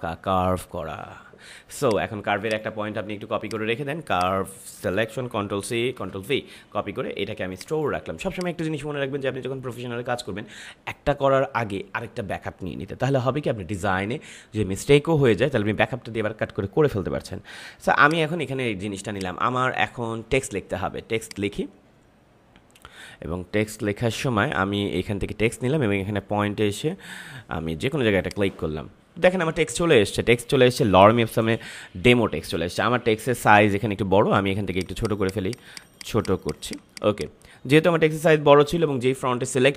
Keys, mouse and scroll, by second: 1.8 click, 3.4 click, 5.1 ctrl+c, 5.9 ctrl+v, 7.5 click, 18.0 click, 28.1 click, 34.7 click.